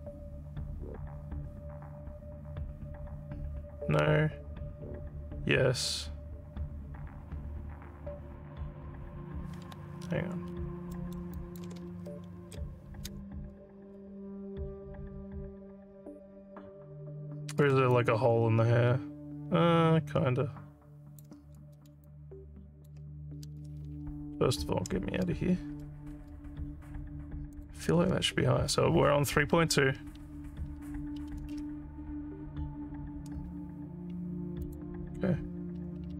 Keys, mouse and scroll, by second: 10.1-10.6 alt+scroll up 3, 10.9 alt+middle click, 11.3 alt+click, 11.9 z, 18.0-21.2 alt+drag, 22.0 alt+click, 24.4 Tab, 27.5 click, 34.6 click.